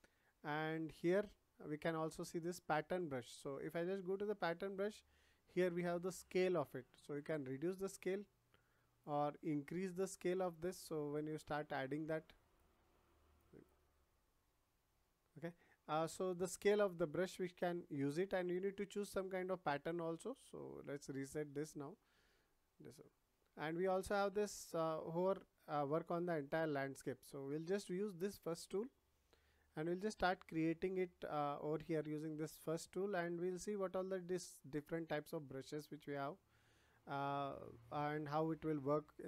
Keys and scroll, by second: 16.0 ctrl+z.